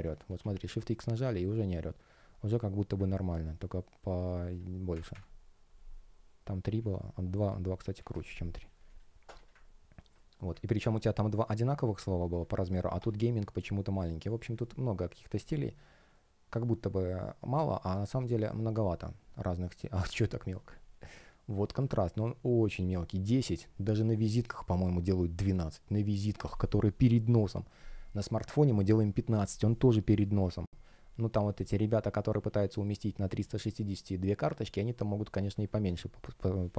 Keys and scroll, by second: 0.3 shift+x, 4.9 Up, 7.3 BackSpace, 14.2 space.